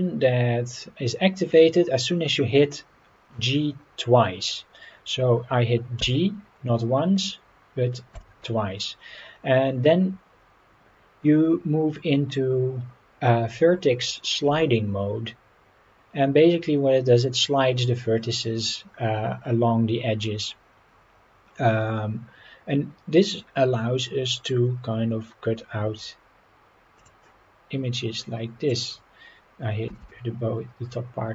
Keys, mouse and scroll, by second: 27.0 click, 28.7 click, 29.9 g.